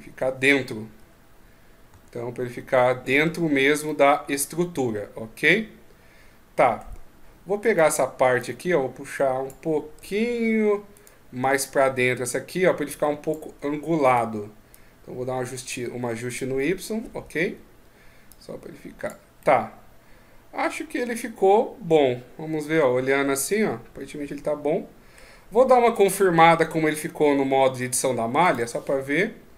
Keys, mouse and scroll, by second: 0.7 KP_1, 1.7 KP_3, 3.6 middle click, 7.4 right click, 8.2 click, 9.8 ctrl+z, 10.7 right click, 11.4 click, 13.8 right click, 14.5 click, 16.0 right click, 19.2 middle click, 27.7 Tab, 28.2 right click, 28.4 Tab.